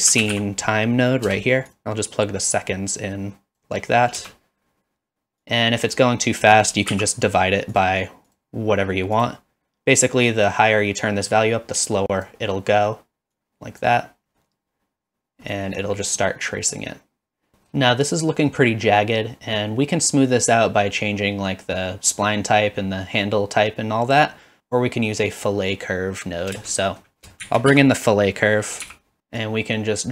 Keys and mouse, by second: 2.6-3.6 drag, 4.2 space, 5.5-6.0 drag, 6.5 click, 7.8 click, 8.3-9.3 drag, 11.0-12.3 drag, 13.3 click, 15.5 middle drag, 16.2-16.7 middle drag, 17.5 middle click, 17.5 space, 26.5 space, 26.8 middle click, 29.5 click.